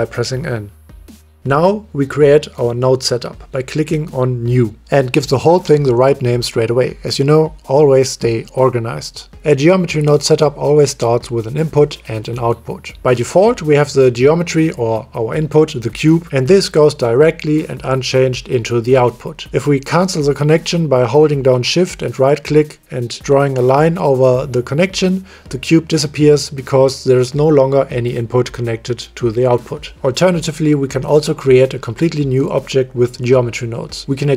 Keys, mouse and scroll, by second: 0.9 n, 3.8 click, 5.2-8.2 drag, 8.7 middle click, 12.0 click, 13.6 click, 14.7-21.9 middle drag, 26.0 ctrl+click, 26.8 click, 28.4 click.